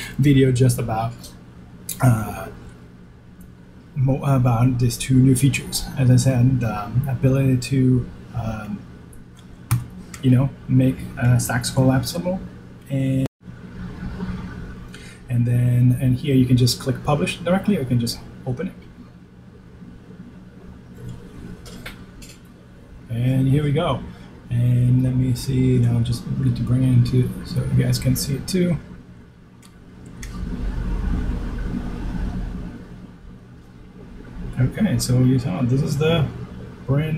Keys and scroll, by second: 14.2 shift+super+h, 34.8 shift+super+b.